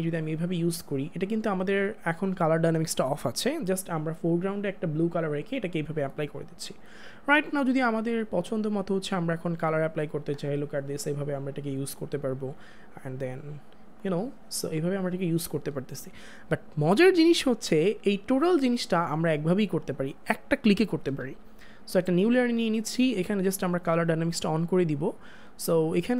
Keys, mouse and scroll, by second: 8.7 click, 12.6 click, 19.7 click, 24.4 click.